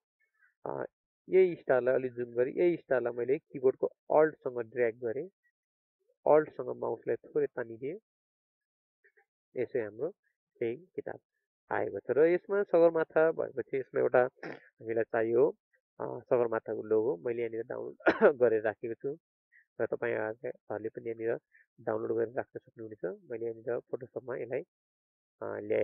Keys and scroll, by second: 0.9 ctrl+space, 9.0 ctrl+alt+space.